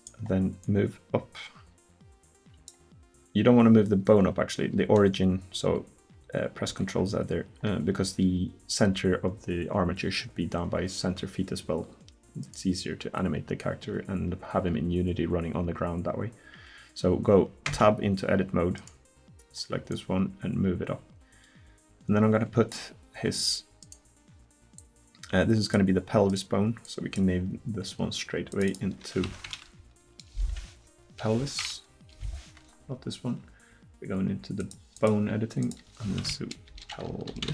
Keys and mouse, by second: 0.6 middle click, 0.7-2.6 right drag, 6.7 ctrl+z, 12.4-14.3 right drag, 17.7 Tab, 18.8-20.9 right drag, 21.2-22.7 drag, 23.8 click, 25.6 click.